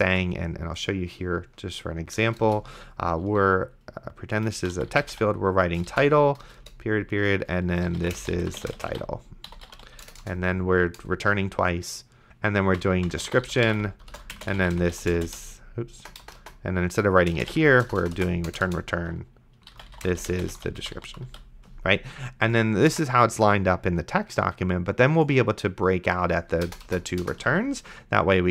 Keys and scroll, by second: 0.4 ctrl+s, 2.3 Return, 4.5-6.2 typing, 6.4 Return, 7.6-10.2 typing, 12.6-15.5 typing, 17.2-18.0 typing, 18.5 Return, 19.6-21.8 typing, 22.9 BackSpace, 27.7 ctrl+s.